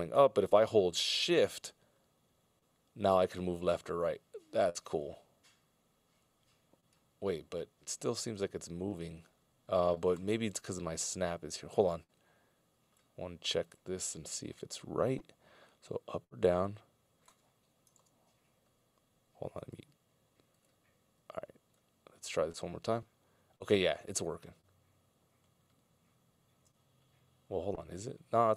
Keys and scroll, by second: 18.0 super+,.